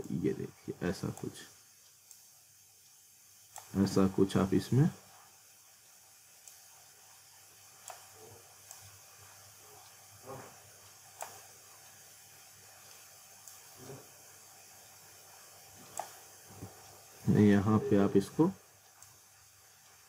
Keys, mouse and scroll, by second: 0.0 click, 1.3 w, 2.1 click, 3.9 z, 4.5 scroll up 1, 6.5 click, 12.3 scroll up 1, 12.7 middle click, 13.5 click, 16.5 z, 16.9-17.2 scroll down 1, 17.2 middle click, 18.3 r, 19.0 click.